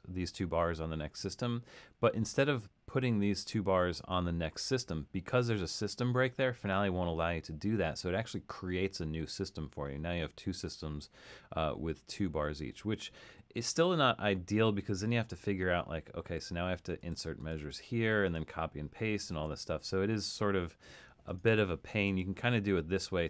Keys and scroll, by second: 19.4 super+z.